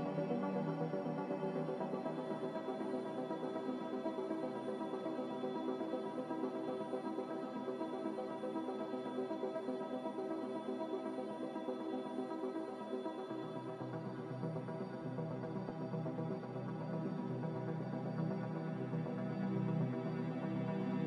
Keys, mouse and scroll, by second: 3.0 b, 7.0-9.3 typing, 10.4 Escape, 12.1-13.3 typing, 16.3 typing, 17.4 Return, 18.9 z, 20.0 Delete, 20.5 Delete.